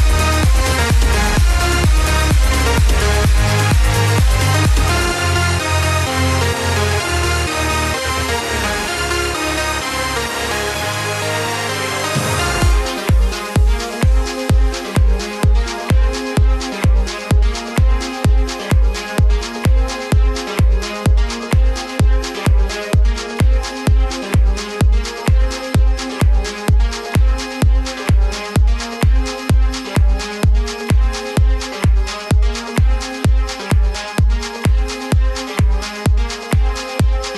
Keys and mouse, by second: 1.8 s, 3.9 click, 5.3 g, 7.2 click, 11.8 alt+click, 13.6 g, 15.6 click, 18.4 s, 19.5 click, 21.1 z, 21.6 click, 23.0 b, 23.6 click, 27.5 z, 28.1 click, 30.3 click, 31.6 z, 33.6 click, 34.5 z, 34.9 click, 36.4 b, 36.9 click.